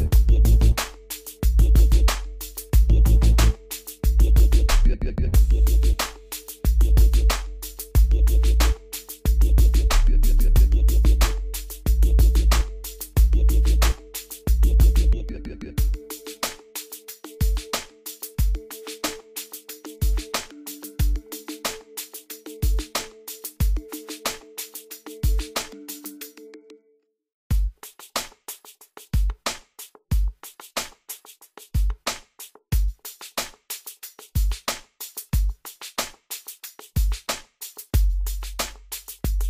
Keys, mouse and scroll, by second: 1.5 click, 1.9 scroll up 1, 3.1-3.9 scroll down 1, 4.8 click, 6.2 Escape, 7.6 click, 10.7-11.8 scroll up 1, 11.8-12.4 scroll down 1, 12.8 scroll down 1, 16.3 click, 17.2 scroll up 1, 17.6 click, 17.8 scroll up 1, 18.0 middle click, 18.5-19.2 scroll up 1, 19.2 scroll down 1, 21.2 right click, 22.0 click, 22.4 middle click, 23.4 scroll up 1, 24.0 click, 24.6 scroll down 1, 24.8-26.6 middle drag, 26.6 click, 27.0-27.5 scroll up 1, 27.5 click, 28.8-29.4 scroll up 1, 29.4 middle click, 30.0 scroll down 1, 31.1 click, 37.4-39.4 drag.